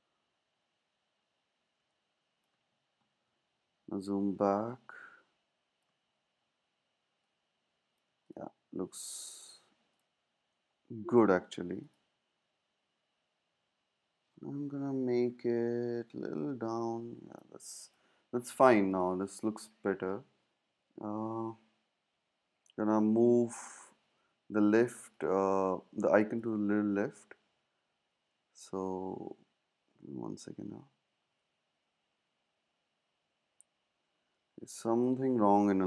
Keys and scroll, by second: 15.1 Down, 15.3 Down, 20.7 shift+Left, 24.1 super+z, 28.1 super+z, 34.2 super+z.